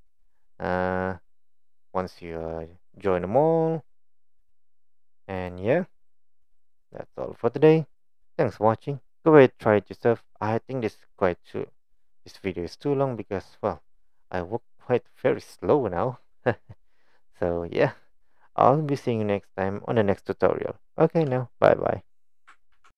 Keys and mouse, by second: 0.5 click, 4.4 click, 5.9-7.3 middle drag.